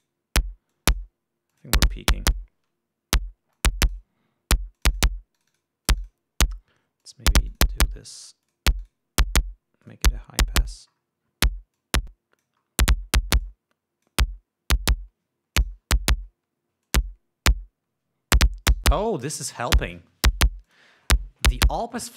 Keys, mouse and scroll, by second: 1.3 click, 2.1 click, 4.1 click, 5.4 click, 6.0 click, 6.5 click, 7.6 click, 8.1 click, 8.8 click, 9.4 click, 10.4 click, 11.2-11.7 scroll up 1, 12.4 click, 13.2 scroll up 1, 14.0 click, 16.2 click, 17.5 click, 19.5 click, 21.3 click.